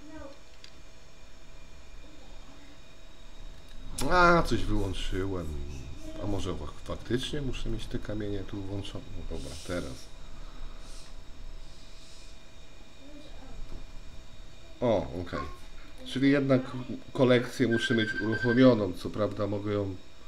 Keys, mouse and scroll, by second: 1.9 F12, 7.3 click.